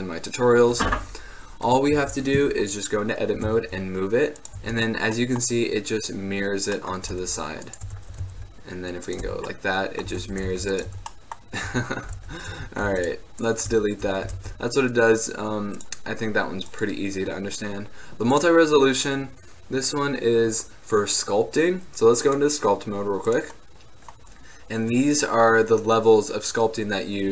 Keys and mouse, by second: 2.0 Tab, 3.5 g, 4.7 Tab, 5.3-7.0 drag, 7.1-7.6 drag, 7.2 g, 8.0 Tab, 8.2 g, 8.9 click, 9.4 Tab, 10.2 Tab, 10.4 g, 11.0 Tab, 11.8 Tab, 12.2 x, 12.7 Tab, 13.0 x, 14.5 shift+a, 21.9 middle drag, 22.4 drag, 22.6 click, 22.9-26.8 drag.